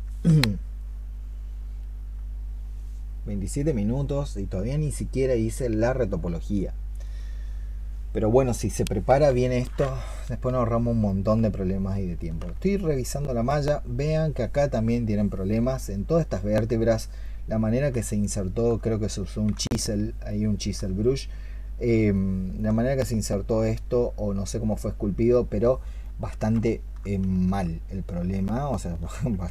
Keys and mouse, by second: 12.7 alt+click, 17.8 alt+click, 18.1 alt+click, 19.4 alt+click, 20.1 alt+click, 22.0 alt+click, 28.3 alt+click.